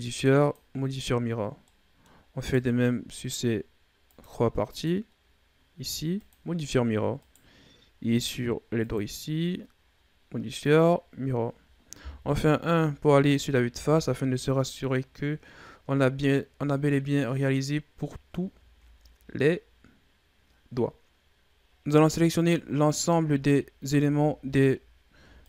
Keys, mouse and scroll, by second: 1.5-2.2 middle drag, 2.2 right click, 4.0-7.1 drag, 7.1 right click, 8.6-11.3 drag, 11.3-12.0 scroll down 4, 12.0 KP_1, 13.1-13.5 scroll down 4, 13.5 a, 13.9-14.6 scroll down 5, 14.6-15.9 scroll up 5, 15.9-16.9 ctrl+scroll up 4, 16.9-17.9 scroll up 4, 17.9-18.5 ctrl+scroll up 3, 18.6-19.4 scroll down 2, 19.4-21.6 scroll down 3, 21.6 shift+Right, 21.8 scroll down 1, 22.2 a, 22.6 right click, 23.2 scroll down 2, 23.5-24.3 shift+scroll up 3, 24.5-25.4 scroll up 4.